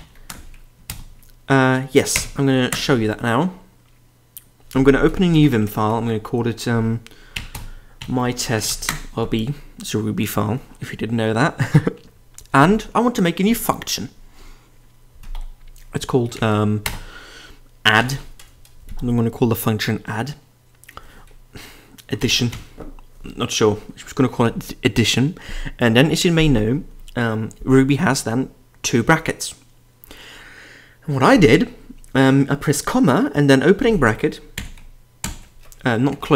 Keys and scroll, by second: 0.0-0.5 typing.